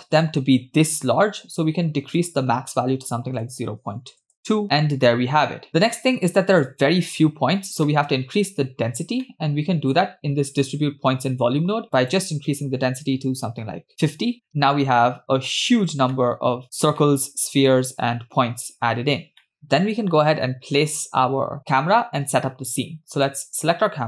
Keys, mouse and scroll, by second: 2.2-4.4 drag, 4.6-5.7 middle drag, 7.6-7.9 scroll down 2, 7.9 middle click, 8.8-9.2 scroll up 2, 9.3 middle click, 12.0-13.9 drag, 13.7 0, 14.5-15.5 middle drag, 15.5 scroll up 2, 16.2-16.6 middle drag, 16.6 scroll up 1, 17.1-17.7 shift+middle drag, 18.9-19.4 scroll down 1, 19.4 middle click, 23.2 click.